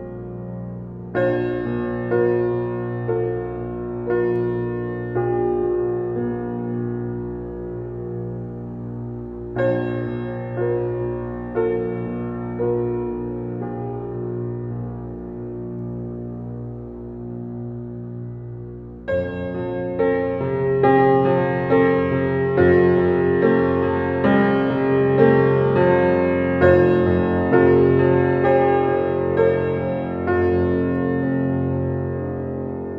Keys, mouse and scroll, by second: 2.1 scroll up 1, 6.1-6.5 scroll down 1, 7.2 scroll up 1, 7.4 alt+middle click, 8.0-8.4 scroll up 1, 8.8-10.3 alt+middle drag, 10.1 click, 10.3 click, 14.2 BackSpace, 15.3 click, 23.8 click, 26.6 alt+right click, 27.2 alt+click, 27.5 alt+right click, 28.7 click, 29.1 scroll up 1, 29.7 alt+middle click, 30.3 alt+right click, 31.3 click.